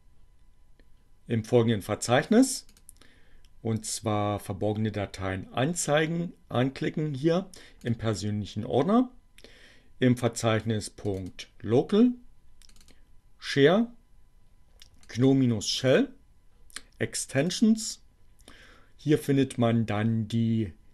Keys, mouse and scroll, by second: 2.6 click, 6.2-8.1 drag, 11.0 click, 12.7 click, 15.0 click, 15.6 click, 17.4 click.